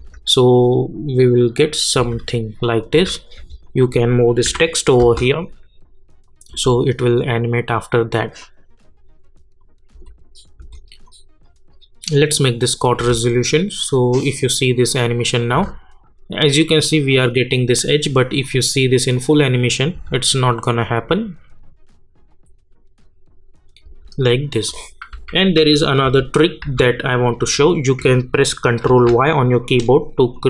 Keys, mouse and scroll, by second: 0.0 space, 2.0 space, 2.6 click, 2.9 space, 3.6 click, 4.4 [, 5.0 space, 8.4-9.9 drag, 9.9 space, 11.0 click, 13.0 space, 15.5 space, 16.8 click, 19.9 space, 23.8 space, 24.6 click, 25.1 u, 25.5 u, 26.0 u, 26.6 u, 27.6 click, 28.8 ctrl+y, 30.3 click.